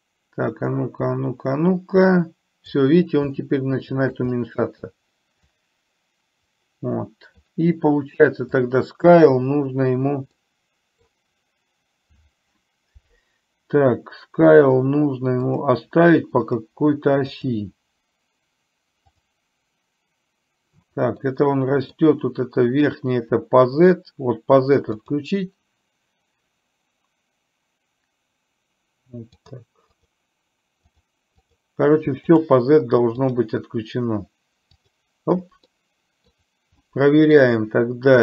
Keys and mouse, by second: 3.4-4.3 shift+middle drag, 4.4-4.9 middle drag, 5.5-7.5 drag, 8.6 click, 10.5-11.1 middle drag, 15.5 click, 16.5 click, 19.1 click, 21.3-22.1 middle drag, 25.1 click, 29.5 click, 30.0 click, 33.3 click, 35.8-36.4 middle drag, 36.9-37.5 middle drag.